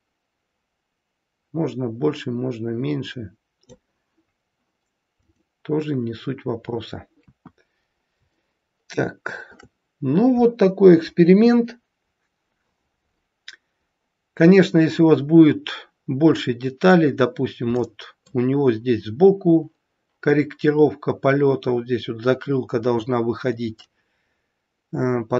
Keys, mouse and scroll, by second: 5.3 click, 7.1 KP_1, 7.8-8.2 scroll down 2, 8.3 shift+middle click, 13.0-14.0 scroll up 3, 14.0-14.6 scroll down 1, 14.6 middle click, 17.7 middle click, 23.7 middle click.